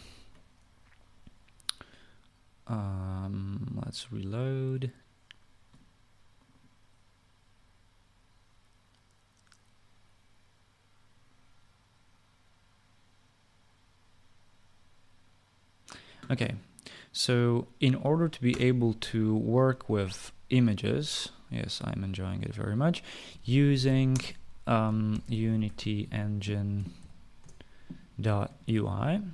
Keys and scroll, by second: 0.0-0.7 typing, 19.1 Return, 23.7-29.3 typing.